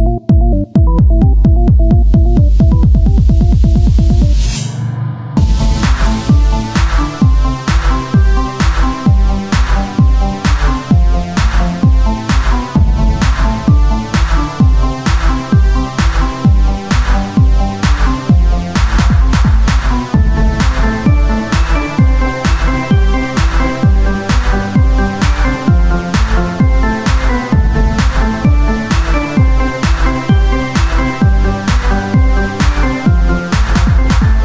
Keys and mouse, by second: 1.2 Tab, 6.7 o, 7.1 s, 8.1-9.3 drag, 11.1-13.4 drag, 11.8-12.8 right drag, 12.8 Tab, 13.4 KP_1, 14.7 z, 17.3 Tab, 17.9 ctrl+Tab, 18.7 z, 19.2 c, 19.9-21.0 drag, 22.4 Tab, 22.6 z, 23.0-24.6 drag, 23.2 Tab, 24.6 c, 25.9 z, 27.2 r, 28.3-29.8 drag, 29.8 r, 32.0-33.0 drag, 33.0 ctrl+Tab, 34.0-34.4 drag.